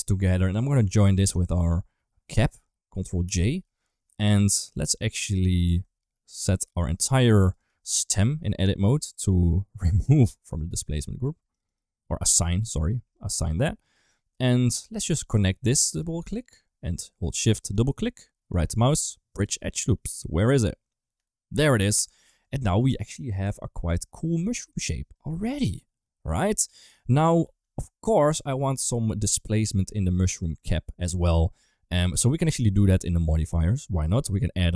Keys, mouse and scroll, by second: 3.1 ctrl+j, 4.3 click, 5.0 middle click, 5.5 Tab, 6.0 3, 6.4 click, 7.0 shift+click, 7.4 shift+click, 7.9 shift+click, 10.3 click, 11.4 click, 11.6 click, 12.1 click, 14.9 2, 15.2 click, 15.6 click, 15.8 click, 17.7 shift+click, 17.7 typing, 18.4-21.5 right drag, 22.1 Tab, 22.5-23.9 middle drag, 24.5 KP_1, 25.4-26.5 middle drag, 26.8 shift+middle click, 27.8 ctrl+s, 27.9 middle click, 30.3 Tab, 30.7 Tab, 32.4 middle click, 34.0 Tab, 34.4 middle click.